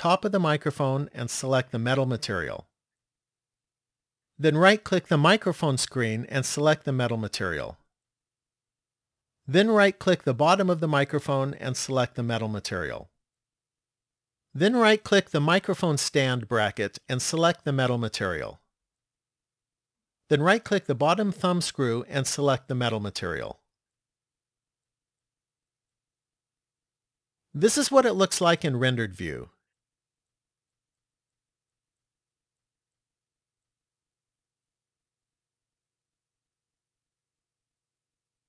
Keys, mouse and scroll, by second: 0.8 click, 5.0 right click, 7.0 click, 10.8 right click, 12.5 click, 16.4 right click, 18.1 click, 22.0 right click, 23.7 click, 28.5 click.